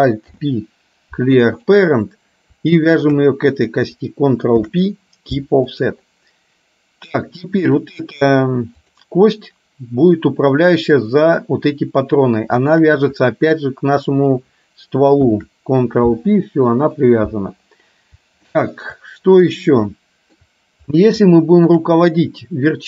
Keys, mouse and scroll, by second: 0.3 alt+p, 3.1 click, 4.7 ctrl+p, 8.0 click, 12.7 shift+click, 15.3 ctrl+p, 17.0 click, 18.6 shift+middle click, 20.1 shift+middle click, 21.3 shift+middle click.